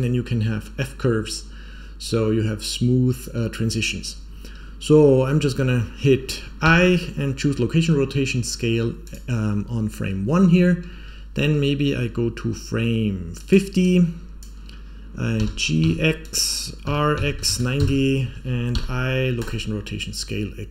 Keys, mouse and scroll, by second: 10.8-13.3 scroll down 2, 13.3 click, 13.8 click, 15.3 g, 16.8 r, 18.6 i.